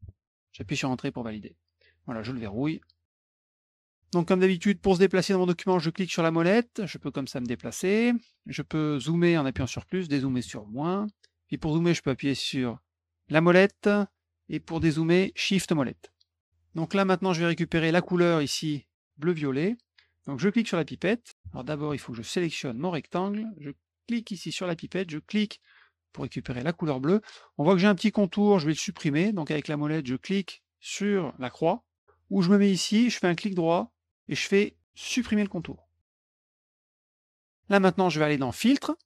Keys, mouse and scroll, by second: 0.0-0.6 typing, 2.6 click, 3.1 middle click, 5.8-8.3 middle drag, 13.2 middle click, 13.2 scroll up 2, 15.6 shift+middle click, 20.7 click, 22.5 click, 22.9 click, 24.5 click, 25.5 click, 33.2 right click, 35.5 click, 36.6 click, 38.5 click.